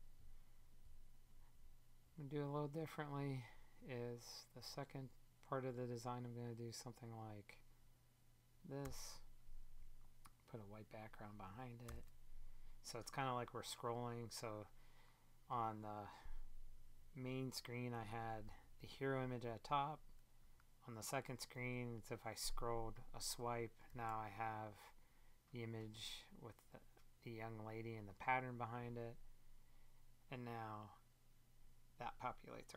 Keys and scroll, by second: 8.7 Return, 11.8 super+BackSpace, 17.8 Up, 21.3 Up.